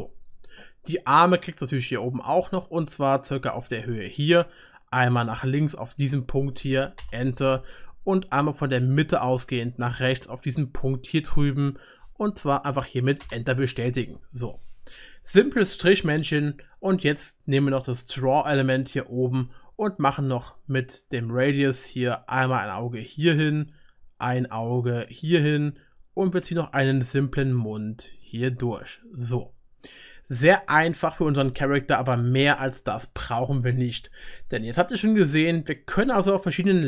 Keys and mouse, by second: 14.1-18.1 drag, 14.1-18.1 middle drag, 14.1-18.1 right drag, 18.7-22.8 middle drag, 23.5-33.5 drag, 23.5-33.5 middle drag, 23.5-33.5 right drag, 34.1-36.8 middle drag.